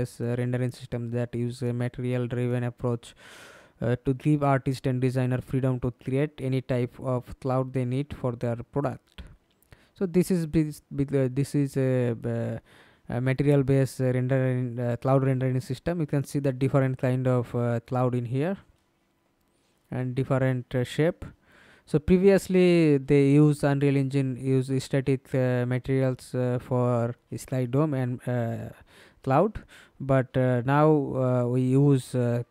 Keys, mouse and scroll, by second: 14.8-15.4 scroll down 2, 15.4 scroll down 1, 15.6 scroll up 1, 17.8-18.4 scroll down 5, 28.4-29.3 scroll down 2, 29.3-30.3 scroll down 9, 31.1-32.5 scroll down 2.